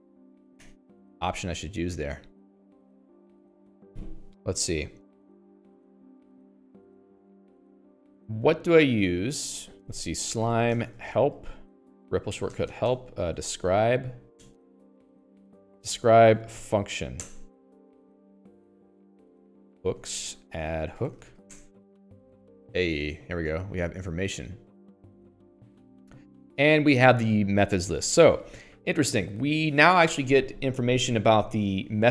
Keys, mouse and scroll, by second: 0.9 click, 1.1 4, 2.7 click, 6.9 click, 10.0 alt+x, 10.6-15.8 typing, 17.1 Down, 17.6 Return, 19.9-22.2 typing, 24.3 click.